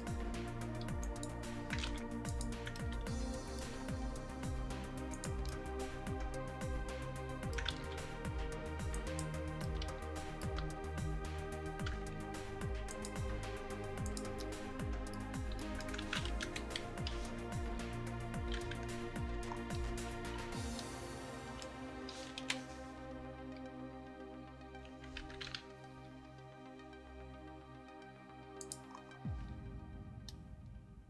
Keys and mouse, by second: 1.1-2.5 drag, 2.0 ctrl+z, 3.9 r, 7.8 ctrl+z, 10.7 r, 13.0-14.1 drag, 14.4-15.8 middle drag, 16.1 ctrl+z, 16.5 KP_1, 17.7 r, 22.5 KP_1, 23.5 r, 26.0 r.